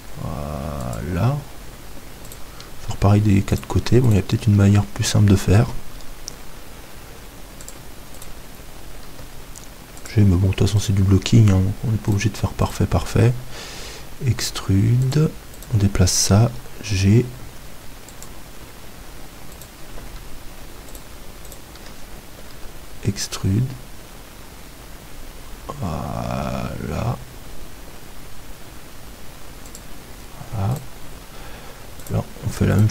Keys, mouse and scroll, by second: 1.0-2.8 drag, 2.3-6.0 right drag, 6.0 e, 7.8-9.5 drag, 8.2-10.0 right drag, 9.1 g, 10.1-12.7 drag, 10.8-15.0 right drag, 13.7 e, 15.6-17.3 right drag, 16.4 g, 18.2-20.1 drag, 19.6-23.2 right drag, 22.5 e, 29.8-32.9 drag, 30.7-32.9 right drag.